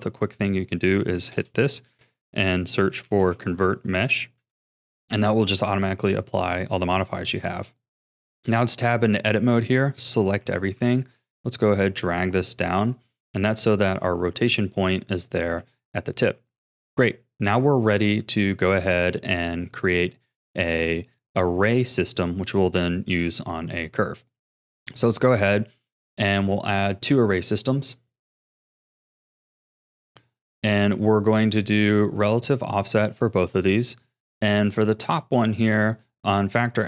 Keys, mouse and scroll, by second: 1.3 space, 7.1-8.1 shift+middle drag, 8.1 Tab, 9.9 a, 10.4 g, 13.1 Tab, 13.8 r, 15.5 a, 15.9-16.5 scroll down 4, 16.5 ctrl+s, 20.8 scroll down 2, 21.1-22.7 middle drag, 22.7 KP_1, 23.4-23.8 scroll up 5, 24.2 click, 26.4-31.5 drag, 35.6-36.8 drag.